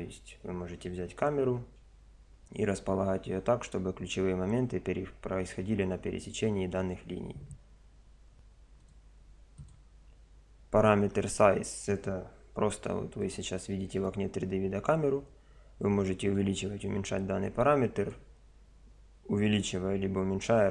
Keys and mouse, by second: 8.8 click, 12.6 KP_0, 13.2 middle click, 13.3 click, 15.2-16.4 middle drag, 16.4 click.